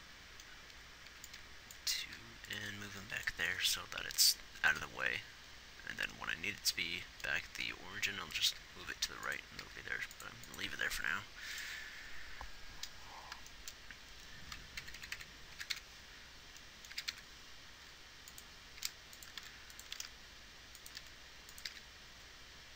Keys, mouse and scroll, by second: 2.4 g, 10.0 g, 15.2 Right, 15.3 Right, 16.0 y, 17.3 g, 19.0 g, 19.7 r, 20.2 r, 22.2 g.